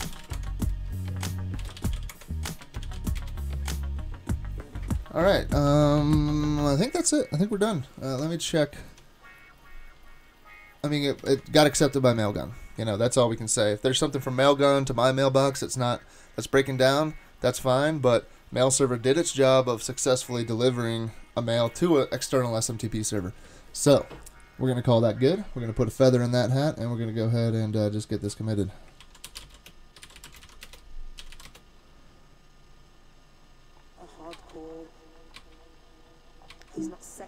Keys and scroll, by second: 0.0-3.7 typing, 8.2 super+Tab, 11.3 super+Tab, 29.0-31.8 typing, 34.4 typing, 35.4 typing, 36.5-37.2 typing.